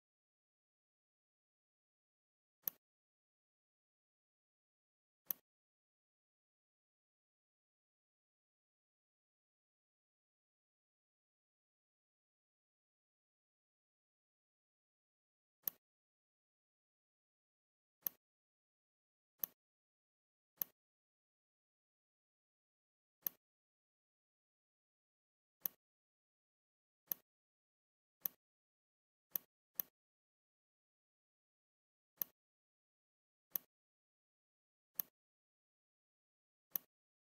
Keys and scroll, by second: 1.4 Up, 8.7 ctrl+c.